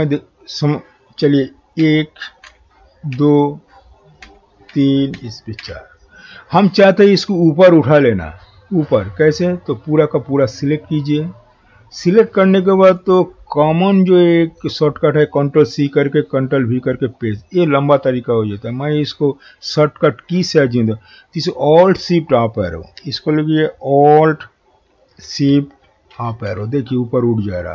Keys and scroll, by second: 26.1 alt+shift+Up.